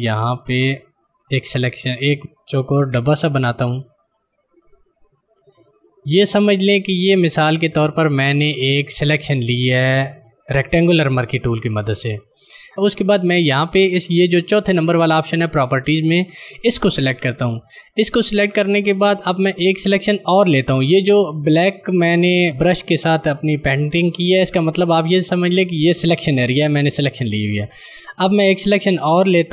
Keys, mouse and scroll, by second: 2.1 shift+click, 17.5 click.